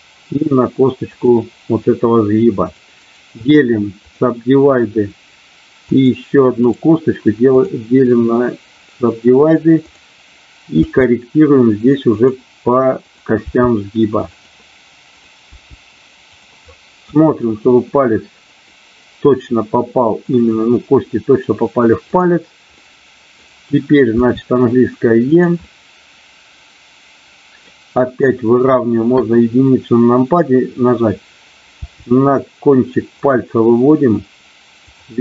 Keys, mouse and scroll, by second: 2.7 click, 5.7 click, 6.6-7.7 right drag, 9.8 click, 10.8 g, 12.1 click, 13.1 click, 13.5 g, 15.5 g, 16.2 click, 16.7 middle click, 18.7-20.2 middle drag, 22.1 click, 22.7 middle click, 24.2 e, 25.3 click, 25.6-27.7 middle drag, 29.1 KP_1, 31.7 g, 33.2 click, 34.8 click.